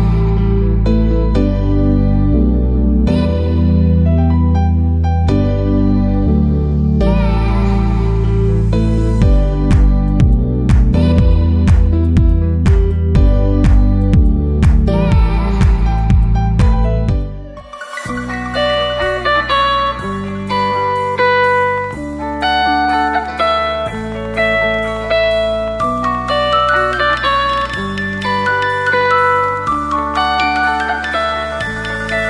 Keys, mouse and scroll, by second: 0.0-1.9 drag, 6.7 a, 7.1 b, 8.4-10.3 drag, 12.4 Tab, 12.8-15.6 middle drag, 13.3 a, 16.9 ctrl+z, 16.9 middle click, 17.2 Tab, 17.3-18.6 middle drag, 17.6 a, 18.3 b, 18.8 click, 19.5-21.8 typing, 22.1-23.7 middle drag, 22.2 Tab, 22.3 Tab, 23.7 click, 23.8 b, 24.1 b, 24.3 b, 24.8 middle click, 25.4 click, 27.9 a, 28.0 b, 28.3 click, 29.2 Tab, 29.7-31.2 drag, 30.0 ctrl+z, 30.2 right click, 31.2 middle click, 31.3 right click, 31.9 middle click, 32.2 Tab.